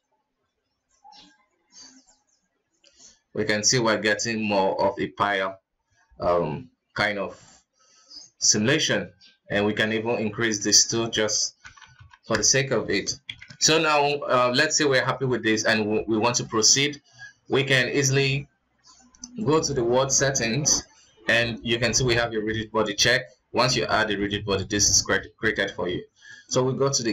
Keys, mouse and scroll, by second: 4.1-7.1 middle drag, 8.3 shift+space, 8.8 right click, 10.2-11.9 drag, 11.9 KP_0, 12.1 KP_0, 13.5 shift+Left, 14.1 ctrl+s, 14.5 middle click, 14.9 alt+a, 16.3-17.7 middle drag, 17.7 click, 19.6 click, 20.9-24.0 drag, 24.4-26.4 middle drag, 26.4-26.9 drag, 26.9-27.1 scroll down 4.